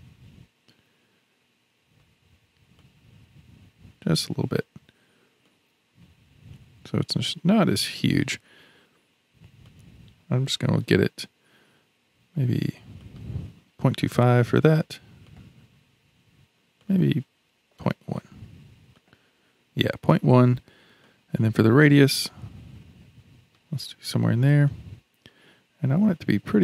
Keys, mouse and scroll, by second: 2.8-8.5 drag, 9.6-12.7 drag, 13.0-15.4 drag, 16.8-19.1 drag, 21.0-24.0 drag, 24.7-26.6 drag.